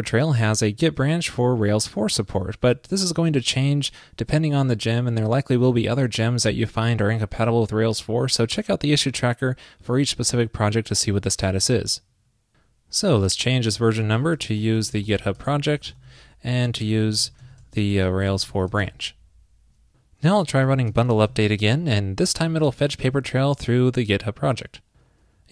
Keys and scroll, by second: 16.1 super+v, 18.9 super+s.